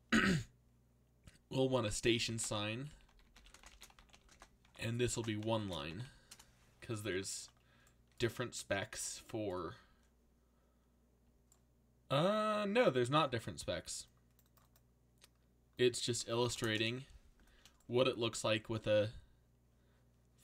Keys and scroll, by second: 2.0-6.5 typing, 16.5 BackSpace, 16.7 Return.